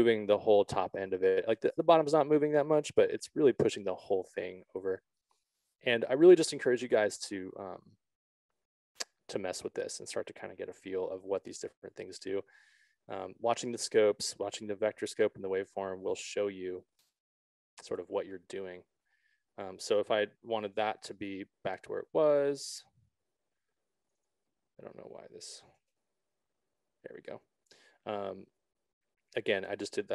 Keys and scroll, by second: 8.2 ctrl+z, 11.2 6, 12.4 Return, 26.0 5, 26.4 Return.